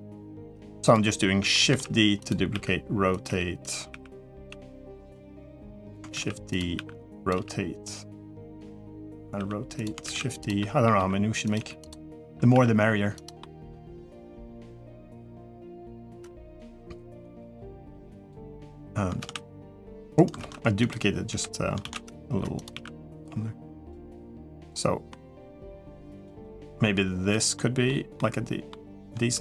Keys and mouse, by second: 0.0-0.3 typing, 0.8 middle click, 1.5-4.3 typing, 5.3 middle click, 5.9 shift+d, 6.5 r, 7.1 g, 8.6 middle click, 9.1-12.3 typing, 10.4 middle click, 11.8 middle click, 13.2 middle click, 14.1 r, 14.2 g, 14.7 middle click, 15.4 r, 15.9 g, 16.5 middle click, 17.2 middle click, 18.0 click, 19.0 shift+d, 20.2 ctrl+z, 21.1-24.0 typing, 24.9 middle click, 25.6 g, 26.2 middle click, 26.7 g, 27.3 middle click, 27.9 middle click.